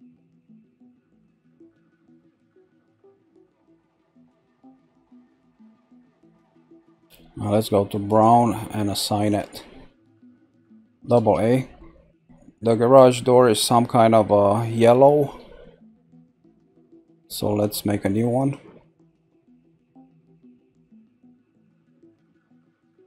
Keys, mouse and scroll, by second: 0.1-0.6 scroll up 1, 0.6-3.3 shift+middle drag, 3.3 shift+click, 4.1-5.2 shift+middle drag, 5.2 shift+click, 5.8 scroll down 2, 6.3-8.0 middle drag, 8.0 click, 9.2 click, 9.9-11.0 scroll down 1, 11.0 a, 11.2 a, 11.9 scroll down 1, 12.1-14.2 middle drag, 14.2-15.5 scroll up 1, 15.5 shift+scroll down 1, 15.5-18.4 shift+middle drag, 18.4 click, 20.6 click.